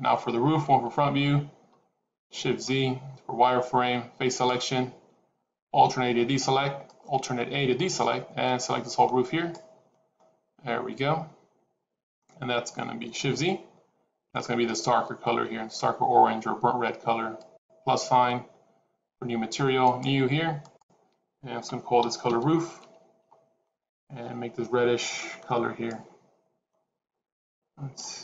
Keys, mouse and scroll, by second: 0.5 KP_1, 2.8 shift+z, 4.3 click, 5.7 alt+a, 6.7 click, 10.1 middle click, 13.3 shift+z, 15.4 shift+z, 17.3 click, 19.7 click, 20.5 click, 22.0 o, 23.7 click.